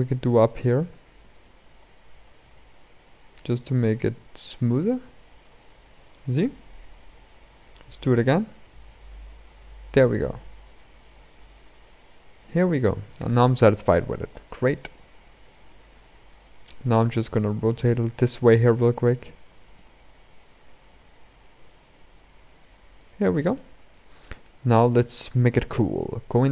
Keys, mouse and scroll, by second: 0.0 shift+middle click, 0.9 ctrl+r, 4.9 Tab, 5.1-6.8 middle drag, 6.8 Tab, 7.3 ctrl+r, 10.1 Tab, 10.4-14.0 middle drag, 14.0 KP_7, 14.8-15.2 scroll down 2, 15.2-15.8 middle drag, 15.8-16.6 scroll down 2, 16.6 r, 19.5 r, 22.7-23.9 middle drag, 23.9 scroll down 2, 24.5 g, 26.1-26.5 drag.